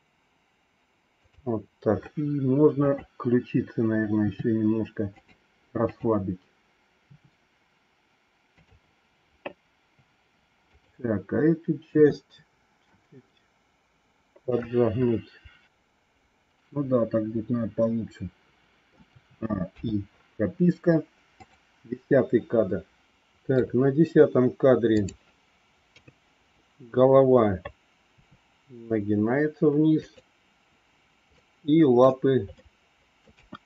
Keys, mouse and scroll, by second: 2.8 click, 4.2 r, 5.8 click, 6.9 r, 10.6 click, 11.9 r, 14.4-18.9 middle drag, 19.1 a, 19.6 i, 21.3 click, 23.1 middle click, 24.9 click, 25.8 KP_3, 28.0 r, 31.3 middle click, 32.5 middle click, 33.2 KP_1.